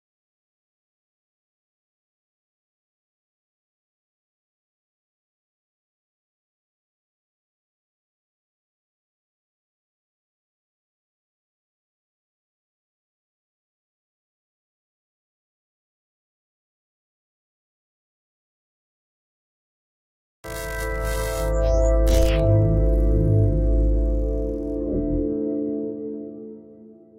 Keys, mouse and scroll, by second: 0.3 click, 1.7 middle click, 1.7-2.9 scroll down 1, 2.9-3.3 scroll up 4, 3.3 middle click, 8.4-9.4 scroll down 3, 8.8 shift+middle click, 9.4 middle click, 16.4 click, 17.3 click.